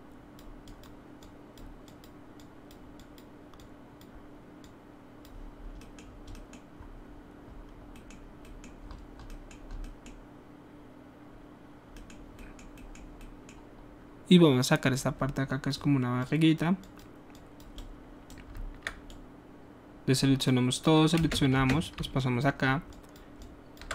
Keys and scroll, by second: 21.2 space, 21.5 space.